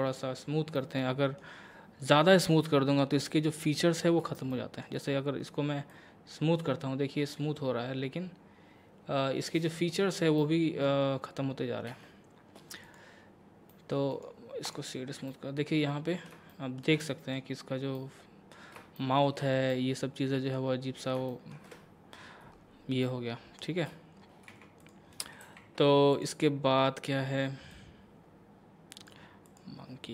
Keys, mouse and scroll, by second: 0.8-4.1 middle drag, 4.5 middle click, 5.9-10.4 drag, 10.4-11.9 middle drag, 11.9 Tab, 12.8 click, 13.4-13.7 scroll up 1, 13.7 middle click, 14.1 right click, 14.7 click, 15.3-19.0 middle drag, 19.7 middle click, 20.9-21.2 scroll down 1, 21.3 shift+middle click, 23.0-24.5 middle drag, 24.5 x, 24.8 click, 25.4 shift+s, 26.1-29.6 drag.